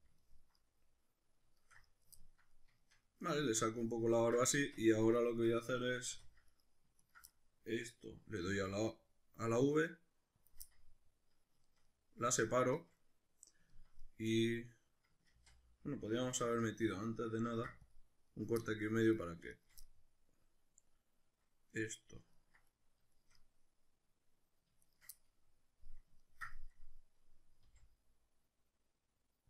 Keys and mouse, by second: 4.6 Tab, 6.1 2, 6.5 right drag, 7.0 ctrl+right click, 7.3-8.4 middle drag, 8.4 v, 10.5 click, 10.6 middle click, 12.5-16.7 shift+middle drag, 15.3 ctrl+z, 17.5 ctrl+r, 18.4 right click, 18.6 middle click, 19.2 right drag, 19.6 shift+right click, 20.1-24.8 middle drag, 24.8 shift+right click, 25.2-27.6 middle drag, 27.6 v.